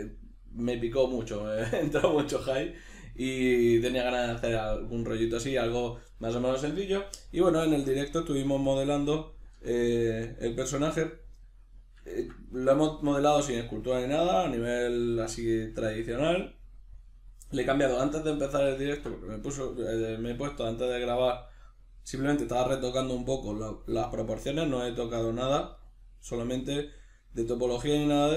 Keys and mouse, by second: 5.1 middle click, 7.6 alt+q, 9.1 ctrl+middle click, 12.9 Tab, 15.0 middle click, 18.5-28.3 shift+middle drag, 24.6 Tab.